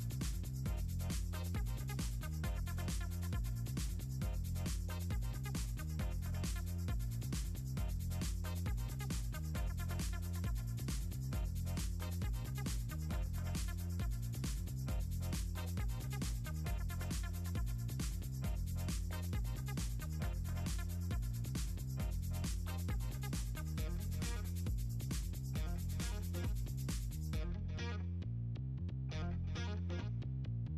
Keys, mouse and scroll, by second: 0.3 click, 1.0 click, 4.0 click, 5.7 click, 5.9 ctrl+c, 8.4 drag, 9.9 click, 10.4 scroll down 2, 11.3 click, 11.8 click, 15.5 click, 17.7 ctrl+middle click, 18.6 click, 19.4 click, 20.2-20.5 ctrl+scroll down 4, 20.7 middle click, 20.8 ctrl+scroll up 2, 21.2 middle click, 21.6 click, 22.3 click, 24.5 click, 25.2 middle click, 25.8 ctrl+z, 27.2 click, 29.5 click, 29.7 click, 29.9 click, 30.1 middle click.